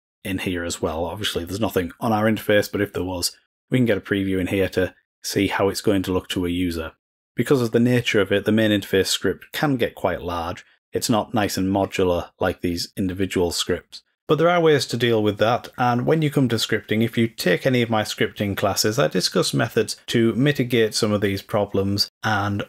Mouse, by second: 7.3-11.9 drag.